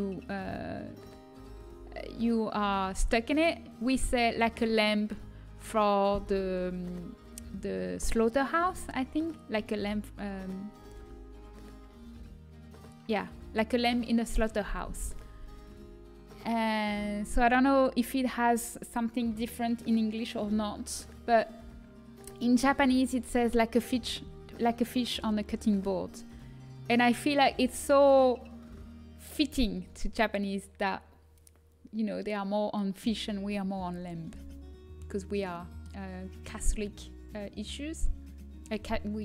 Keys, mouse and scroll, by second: 34.9-38.5 middle drag.